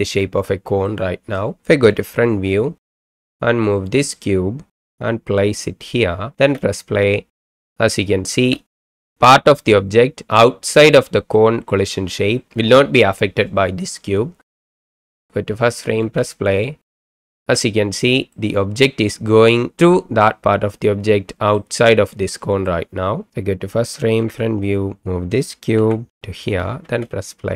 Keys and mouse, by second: 1.0 middle click, 1.9 KP_1, 3.1 shift+middle click, 3.8 click, 4.8 g, 5.8 click, 6.4 space, 8.3 space, 11.5-12.4 middle drag, 14.7 middle drag, 16.0 space, 17.4 space, 18.3-18.8 middle drag, 20.3-21.6 middle drag, 22.8-23.3 middle drag, 24.2 KP_1, 25.8 g, 26.3 click, 26.8 space.